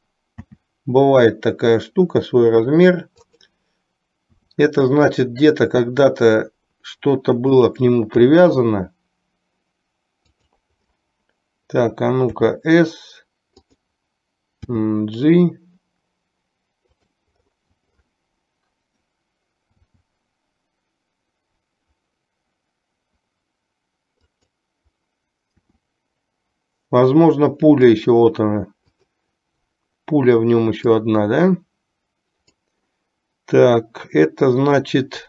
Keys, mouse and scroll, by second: 0.6 s, 4.4 s, 8.4 r, 12.4 s, 14.9 g, 19.9 s, 25.6 r, 28.9 click, 30.9-32.9 drag.